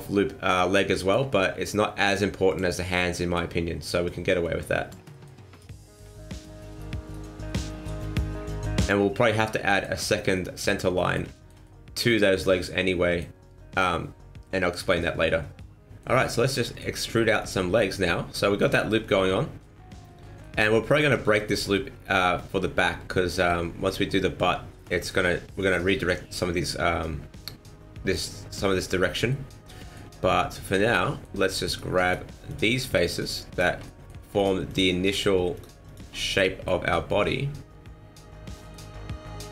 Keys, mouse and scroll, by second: 0.0 middle click, 0.9 shift+middle click, 2.4 click, 2.9 scroll up 1, 3.1 middle click, 4.0 click, 5.1 middle click, 5.5 right click, 5.7 middle click, 6.3 shift+right click, 6.7 right click, 7.0 shift+right click, 7.4 middle click, 8.3 click, 9.1 scroll down 2, 9.2 middle click, 9.6 middle click, 10.1 scroll up 1, 10.3 middle click, 10.9 middle click, 11.3 shift+middle click, 11.6 shift+middle click, 14.7 middle click, 14.7 scroll down 2, 14.9 middle click, 15.8 middle click, 15.8-16.1 scroll up 1, 16.3 middle click, 17.3 right click, 18.0 middle click, 19.5 middle click, 20.6 middle click, 23.1 middle click, 24.7 middle click, 25.5 middle click, 29.2 middle click, 30.8 middle click, 31.6 shift+right click, 32.0 shift+right click, 32.4 shift+right click, 32.9 shift+right click, 33.1 shift+right click, 33.5 shift+right click, 33.8 middle click, 34.3 shift+right click, 34.6 shift+right click, 35.0 shift+right click, 35.5 shift+right click, 35.8 shift+right click, 36.1 middle click, 36.8 scroll down 2, 37.0 middle click.